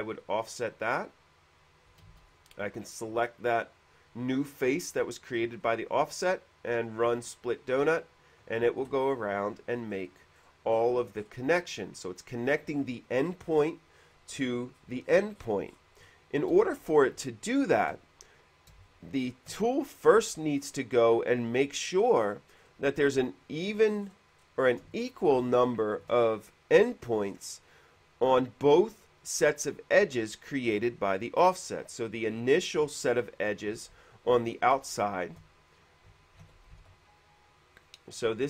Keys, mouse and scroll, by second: 0.3 click, 2.0 click, 2.2 ctrl+z, 2.2 space, 2.2 f, 2.5 click, 5.7 space, 5.8 click, 7.9 space, 10.1 middle click, 10.1-11.6 scroll up 8, 10.6 middle click, 11.0 middle click, 11.3 middle click, 14.4 middle click, 14.6-15.7 scroll up 2, 15.7-16.5 scroll up 1, 17.0 shift+middle click, 19.1 shift+middle click, 20.1-20.5 scroll up 1, 22.8-23.5 scroll down 2, 23.9-25.0 scroll up 2, 25.2-26.2 shift+middle drag, 27.5-27.9 scroll up 1, 33.7 scroll up 1, 34.5 click, 35.3 shift+click, 36.5 ctrl+d, 37.1 alt+e, 38.0 click.